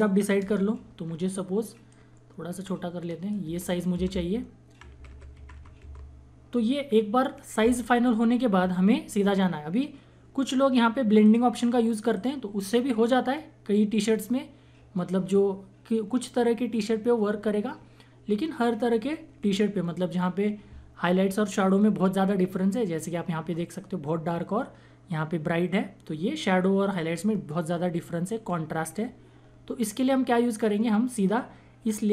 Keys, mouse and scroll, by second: 0.4 Return, 1.9-3.4 drag, 1.9 typing, 3.4 Return, 3.9 Left, 8.0 typing, 11.4 click.